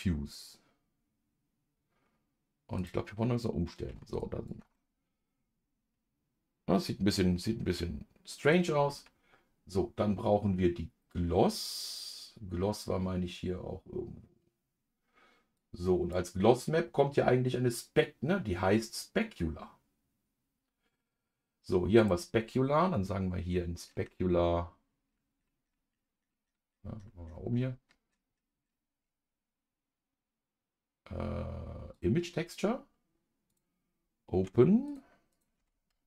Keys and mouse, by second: 2.9 click, 4.7-8.5 middle drag, 22.0-32.0 drag, 33.5-36.0 drag.